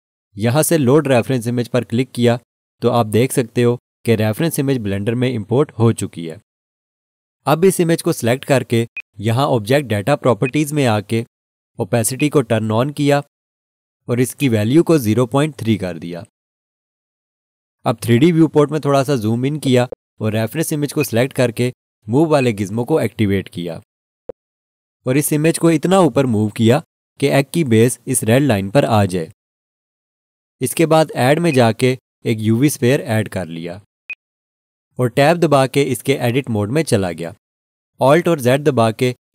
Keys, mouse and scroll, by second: 1.1 click, 8.9 click, 15.4-16.3 typing, 19.5 scroll up 1, 21.4 click, 24.2-24.7 scroll up 1, 25.4 click, 31.5 click, 36.5 Tab.